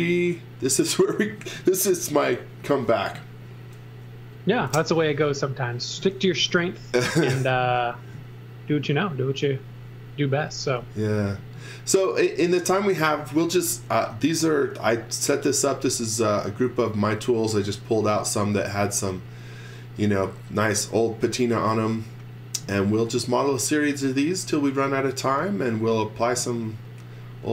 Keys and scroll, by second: 4.3 x, 4.9 v, 9.4 z, 10.5 x, 10.8 v, 12.3 x, 16.6 z.